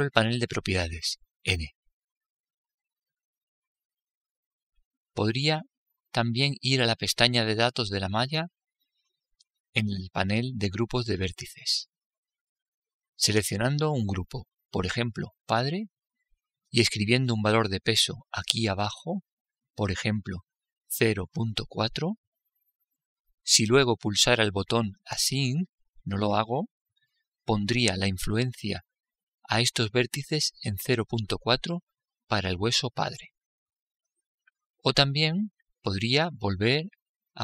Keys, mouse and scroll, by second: 2.2 n, 8.8-11.7 drag, 15.7-17.7 drag, 20.2-22.1 drag.